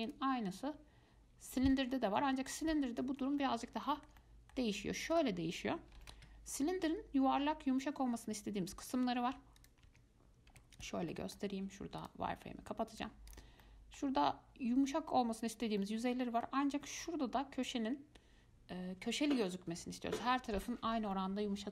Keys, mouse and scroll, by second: 0.3-3.3 drag, 3.6-5.3 middle drag, 5.3-8.4 drag, 9.8 click, 10.1 Tab, 10.7 Tab, 11.0 click, 11.3 middle click, 12.2-13.6 drag, 13.8-14.5 middle drag, 14.5-14.9 scroll up 4, 14.9-15.6 scroll down 2, 16.0-19.0 middle drag, 21.3-21.7 middle drag.